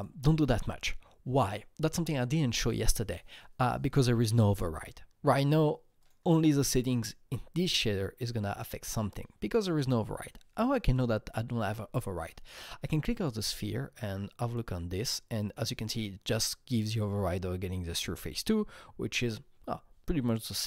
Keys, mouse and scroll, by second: 6.0 click, 6.2 click, 9.5 click, 12.8 click.